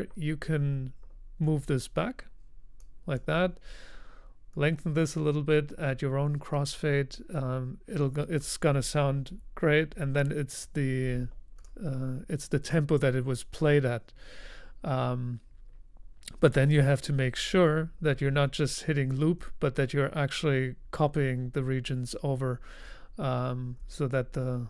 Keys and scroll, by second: 9.2 super+z, 9.8 super+z.